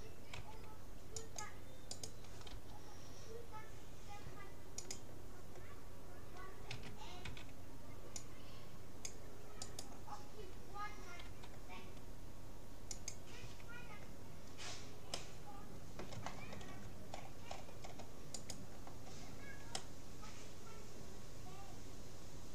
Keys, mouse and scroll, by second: 0.5 c, 2.5 g, 6.7 a, 7.3 c, 9.9-11.7 right drag, 11.3 g, 13.5 a, 14.5 middle click, 15.1 middle click, 17.1-18.5 middle drag, 18.5-20.1 right drag, 19.9 click, 20.1-21.5 middle drag.